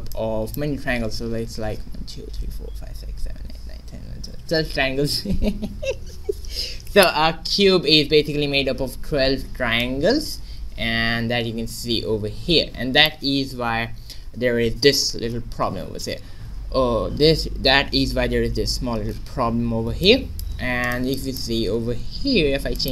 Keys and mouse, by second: 0.1-2.1 middle drag, 9.8-11.5 middle drag, 15.6 shift+z, 18.6 alt+h, 19.4 middle click, 19.7 a, 20.8-22.8 middle drag.